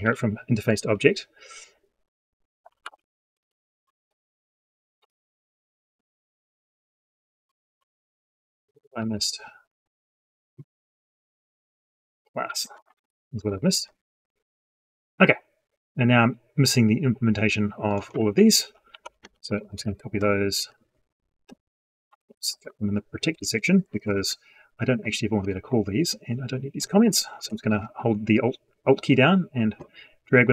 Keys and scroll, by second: 20.4 ctrl+c, 22.5 ctrl+v, 30.4 ctrl+shift+c.